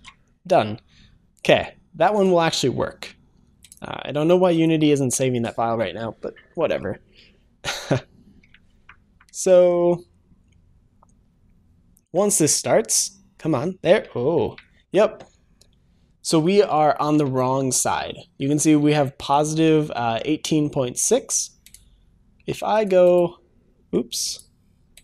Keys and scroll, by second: 2.2 ctrl+shift+s.